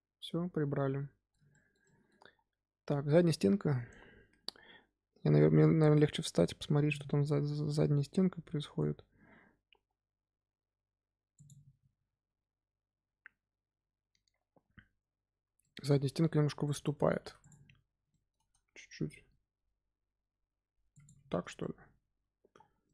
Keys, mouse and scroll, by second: 2.2-2.6 scroll up 2, 15.5-16.6 middle drag, 16.6 click, 16.9 Tab, 17.1 3, 17.3 click, 17.7 scroll down 2, 18.0 shift+middle click, 19.0 g, 21.2 Tab, 21.5-22.6 middle drag, 22.6 scroll down 1, 22.8-22.9 middle drag.